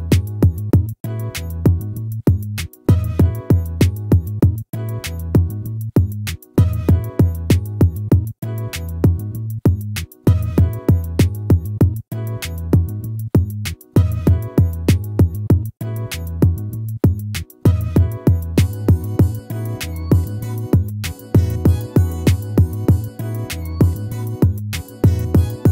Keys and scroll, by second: 9.4 ctrl+-.